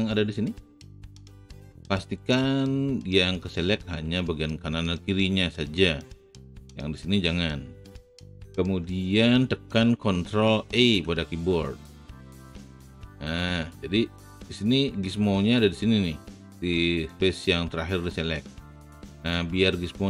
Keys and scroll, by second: 10.7 ctrl+e.